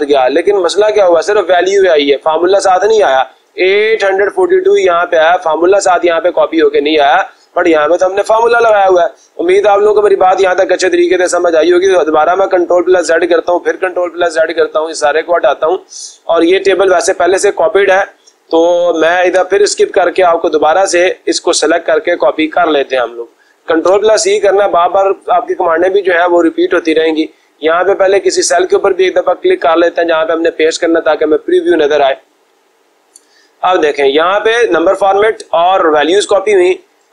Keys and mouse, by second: 1.8 click, 2.0 click, 5.1 click, 7.1 click, 7.4 click, 8.6 Escape, 11.1 ctrl+z, 13.5 ctrl+z, 15.5 click, 19.3 Escape, 22.8 click, 23.7 ctrl+c, 25.8 click, 28.0 click, 28.5 click, 30.0 click.